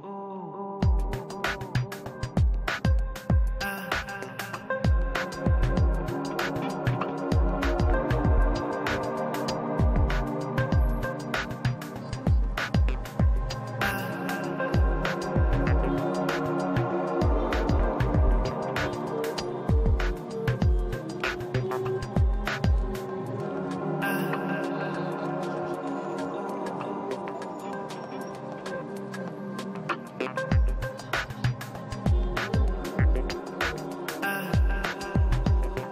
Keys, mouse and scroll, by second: 0.0 Return, 0.4 middle click, 1.1-2.4 drag, 2.0 middle click, 2.6-10.2 drag, 3.1 middle click, 4.4 middle click, 5.3 middle click, 7.1 middle click, 8.1 middle click, 10.2-11.2 middle drag, 10.3 f, 10.7-16.3 drag, 11.7-14.3 middle drag, 14.9-20.3 middle drag, 16.9 shift+c, 17.0 f, 17.6-26.1 drag, 22.0-24.6 middle drag, 25.4-28.0 middle drag, 27.0 f, 27.4-31.2 drag, 28.1 middle click, 29.7 f, 30.8 i, 31.0 middle click, 31.4 f, 31.5-35.9 drag, 32.1-33.4 middle drag, 32.3 f, 35.3 1.